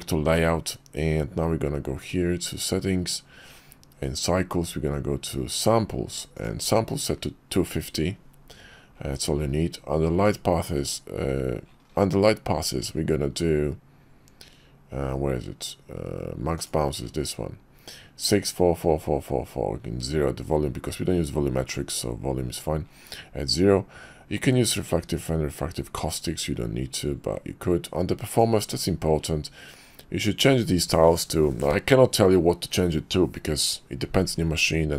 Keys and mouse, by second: 6.3 click, 16.5 click, 28.3 click.